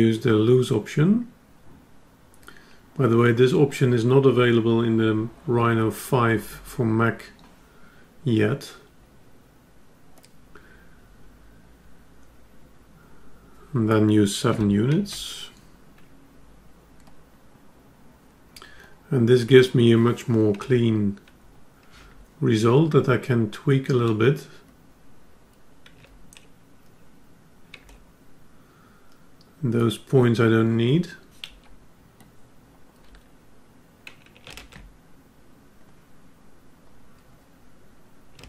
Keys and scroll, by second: 21.0 F10, 35.0 ctrl+z.